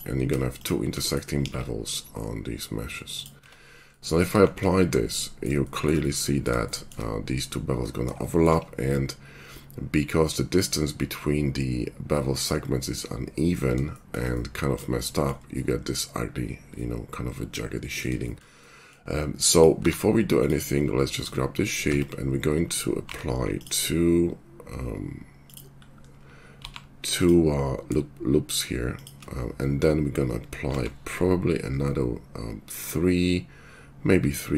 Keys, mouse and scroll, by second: 1.3 ctrl+b, 3.3 Tab, 4.4 shift+2, 15.0-22.3 middle drag, 19.7 q, 21.8 Tab, 22.3 click, 22.7 ctrl+middle click, 23.0 ctrl+r, 23.2-24.9 drag, 26.5 ctrl+r, 30.7 ctrl+r.